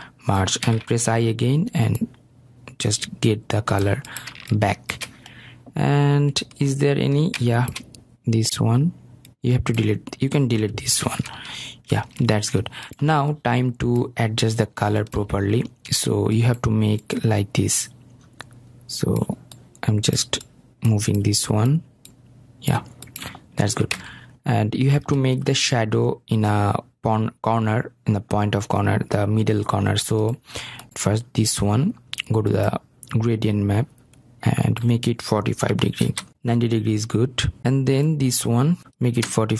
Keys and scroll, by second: 11.2 Delete, 36.3 Return, 38.8 Return.